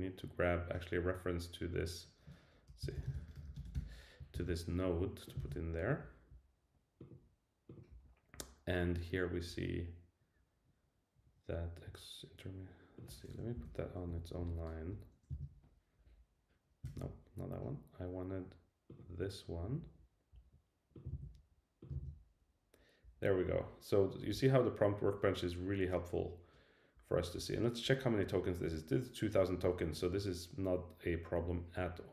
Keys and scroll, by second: 4.3 super+c, 5.4 super+v, 13.5 shift+Left, 14.9 Return, 15.3 super+v, 17.0 super+z, 21.1 super+c, 21.9 super+v.